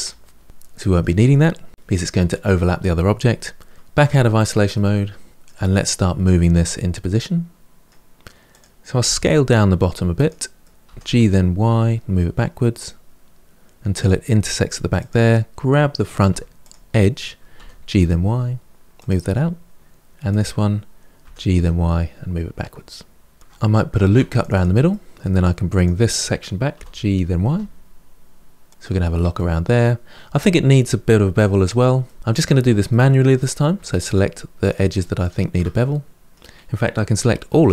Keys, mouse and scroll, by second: 0.8 middle click, 3.8 KP_Divide, 4.5-8.3 middle drag, 8.3 click, 9.0 s, 10.4 middle click, 10.7 g, 14.8 click, 16.1 2, 16.4 click, 17.4 g, 19.1 middle click, 20.1 click, 21.0 g, 23.8 ctrl+r, 24.7 middle click, 25.5 click, 26.5 g, 28.7-33.8 middle drag, 33.8 shift+click, 34.4 shift+click, 35.0 shift+click, 35.4-37.3 middle drag, 37.3 a.